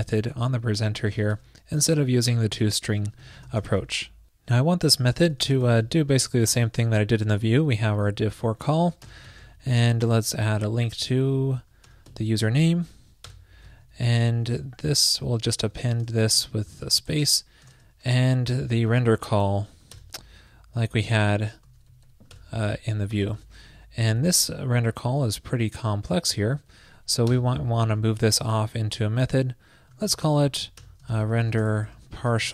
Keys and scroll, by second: 1.6 shift+super+Right, 6.5 super+v, 8.0 alt+shift+Left, 9.4 super+Right, 10.6 alt+Left, 10.7 alt+Left, 13.8 shift+super+Right, 18.7 super+Left, 20.7 super+Right, 24.2 alt+Right, 25.7 alt+Right, 28.2 shift+super+Left, 30.4 super+x, 30.4 shift+super+Right.